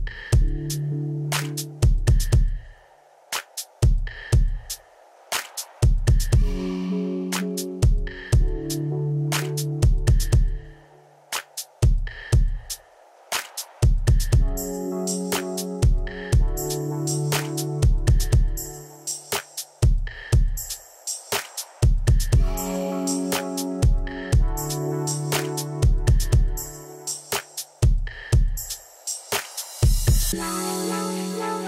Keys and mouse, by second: 5.2 Escape, 18.1 click, 18.5 Escape, 19.1 click, 19.3 Escape, 19.5 click, 19.9 Delete, 22.7 Escape, 23.6 y, 23.7 click, 23.8 right click, 24.4 click, 25.9 click, 27.9 click, 29.1 click, 30.2 click.